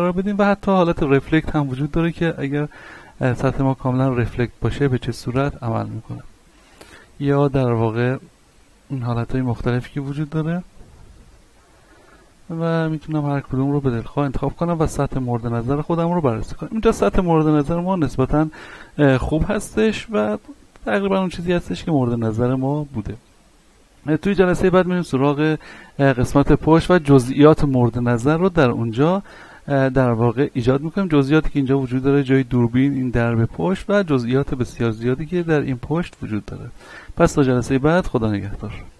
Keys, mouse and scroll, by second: 1.3-6.1 middle drag, 6.1 click, 6.9 click, 8.9 middle click, 9.5 shift+middle click, 11.3 click, 14.3 click, 34.3 middle click, 35.7 z, 36.1-38.1 scroll down 1.